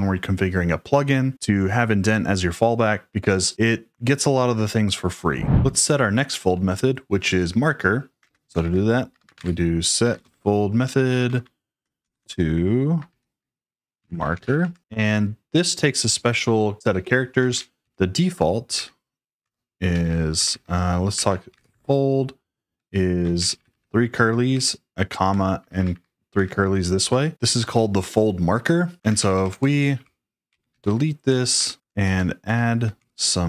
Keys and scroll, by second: 7.9-11.7 typing, 13.1-14.9 typing, 16.8 j, 17.4 shift+o, 17.7 Return, 18.7-22.1 typing, 23.3-24.5 typing, 25.5-26.3 typing, 28.9-32.3 typing, 31.5 Escape, 32.4 Escape.